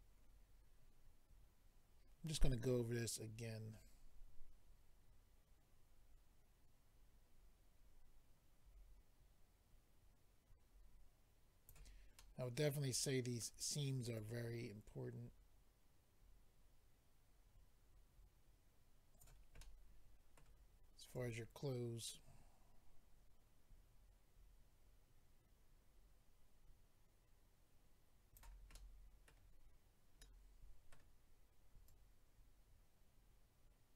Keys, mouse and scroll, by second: 2.6 click, 12.2 middle click, 14.2 click, 19.6 middle click, 21.1 click, 28.7 middle click, 30.2 middle click, 31.9 click.